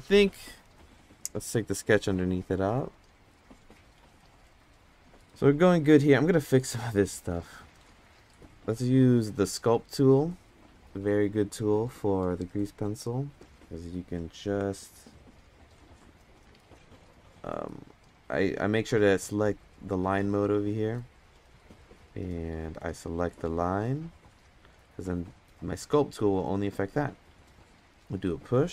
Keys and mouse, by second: 3.3 click, 5.2 Tab, 7.1-8.3 drag, 9.9-12.9 drag, 15.0 click, 17.0 click, 23.0-23.7 drag, 24.5-28.7 drag.